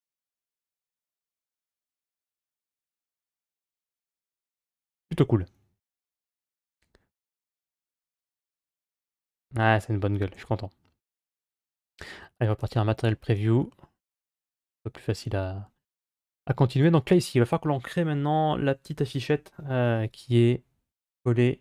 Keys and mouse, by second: 1.5 click, 6.1-9.7 middle drag, 10.3 z, 13.4-15.9 middle drag.